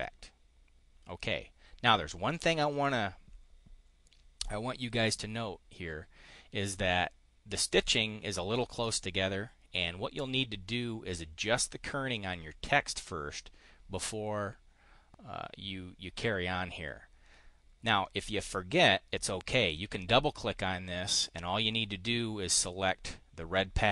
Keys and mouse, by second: 19.4 click.